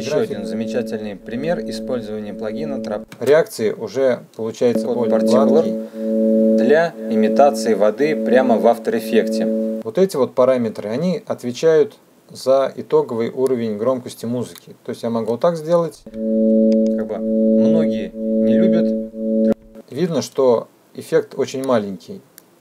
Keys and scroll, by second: 3.3 space, 9.6 space, 15.5 space.